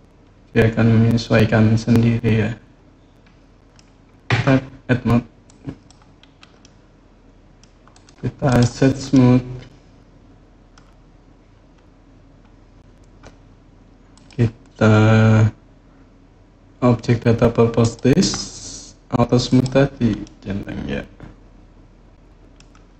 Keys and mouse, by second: 4.1 Tab, 5.2 click, 6.4-7.4 middle drag, 8.9-10.5 middle drag, 13.9 click, 17.6 click, 19.2 click, 20.0-22.3 middle drag.